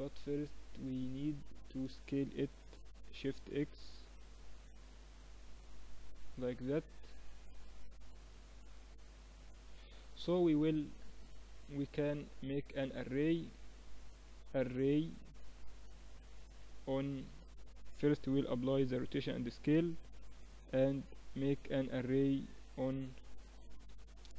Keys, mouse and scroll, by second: 2.3 s, 3.1-6.0 drag, 3.1-5.8 right drag, 6.2 middle click, 7.8-9.7 drag, 9.4 right click, 9.7 middle click, 9.8-12.4 middle drag, 12.4-15.4 drag, 18.1 ctrl+a, 22.8-24.3 drag.